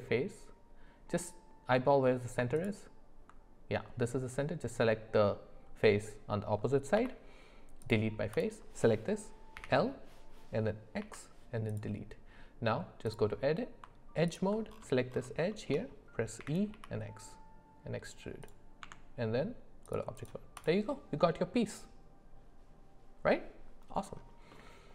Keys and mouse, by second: 6.9 x, 8.3 click, 9.6 l, 10.9 x, 13.0 click, 14.3 alt+click, 15.5 shift+middle click, 18.8 Tab, 20.6-21.8 drag, 24.5 middle click.